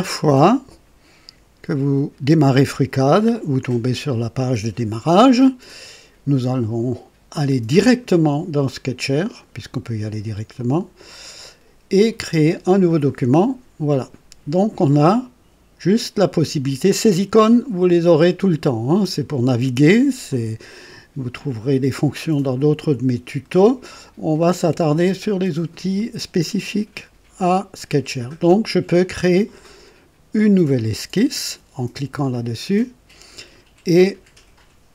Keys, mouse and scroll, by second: 7.4 click, 9.1 click, 10.5 click, 13.3 click, 32.1 click.